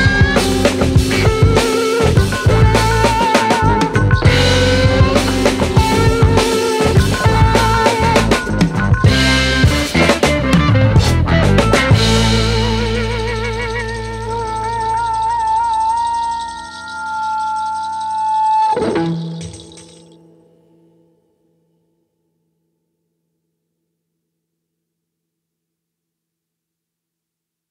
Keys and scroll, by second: 2.0 space, 9.2 space, 12.9 space, 15.3 space.